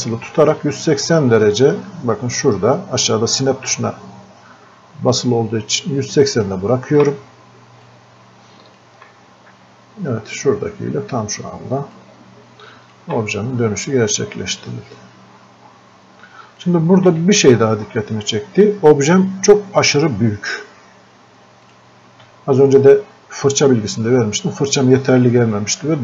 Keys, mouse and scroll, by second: 7.9-12.0 drag, 12.0-13.6 drag, 13.6-13.9 scroll up 1, 16.6 alt+click, 17.9-18.4 scroll up 1, 21.7 scroll up 1.